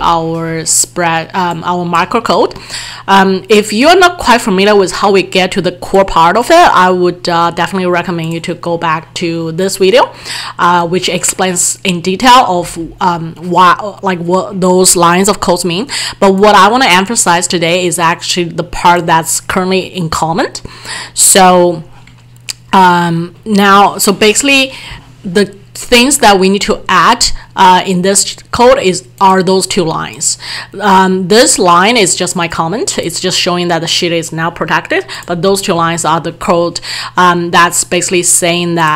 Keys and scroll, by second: 12.7 alt+Tab.